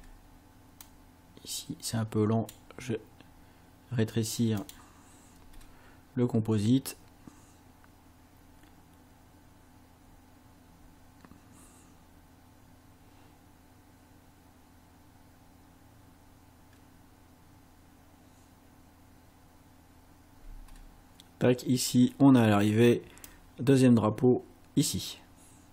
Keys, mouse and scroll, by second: 0.8-2.6 drag, 4.6 click, 5.6 space, 20.4 space, 23.3-25.7 drag.